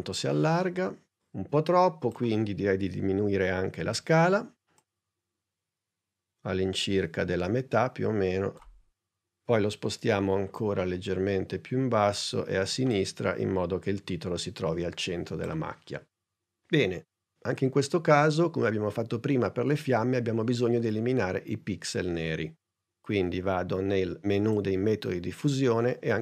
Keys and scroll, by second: 4.1 s, 9.9 p.